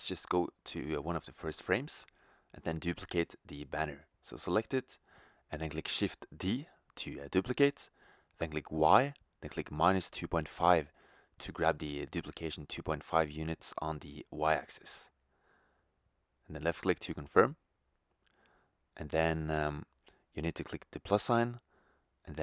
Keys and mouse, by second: 0.1-0.7 middle drag, 1.6-3.0 drag, 3.0 middle click, 3.4-4.7 right drag, 7.7 shift+d, 19.6-22.4 drag.